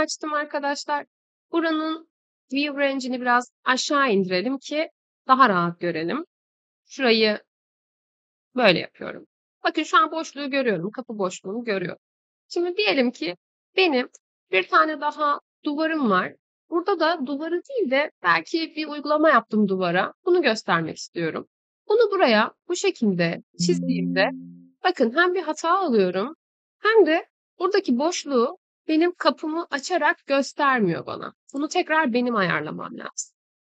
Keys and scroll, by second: 7.4-8.4 typing, 24.4 Escape, 32.8 Delete.